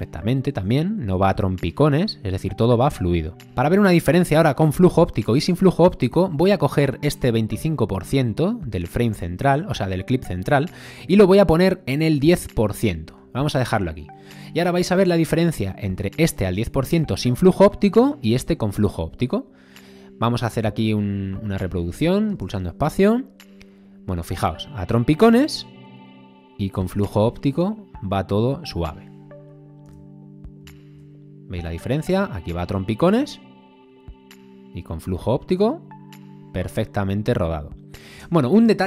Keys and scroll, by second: 0.6 space, 22.3 space, 29.9 space, 38.2 space.